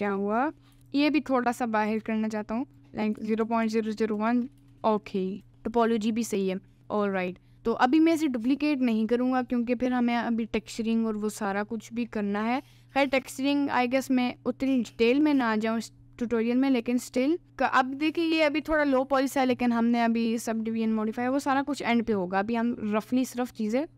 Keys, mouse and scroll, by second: 0.4 middle click, 0.8 g, 2.0 click, 2.7-4.6 drag, 3.6 0, 5.2 middle click, 5.5 alt+h, 5.8 middle click, 6.4 middle click, 6.8 Tab, 6.8 middle click, 7.7 click, 9.5 click, 18.1-23.9 middle drag.